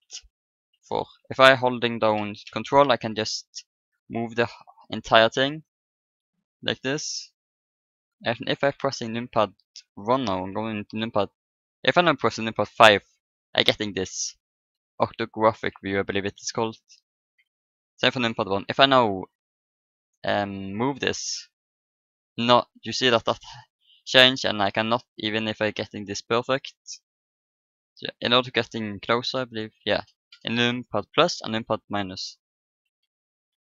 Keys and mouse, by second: 0.0-1.0 typing, 3.1 ctrl+KP_2, 3.7 ctrl+KP_8, 5.5 ctrl+KP_4, 6.1 ctrl+KP_6, 8.7 KP_1, 9.2 KP_7, 9.3 KP_7, 12.6 KP_5, 17.3 KP_1, 19.5 right click, 19.6-21.2 drag, 20.7-21.8 right drag, 22.3 middle click, 24.2-26.0 middle drag, 27.7 KP_1, 29.3 KP_Add, 29.9 KP_Add, 30.3 KP_Add, 31.3 KP_Subtract, 31.5 KP_Subtract, 32.8 =, 33.3 =.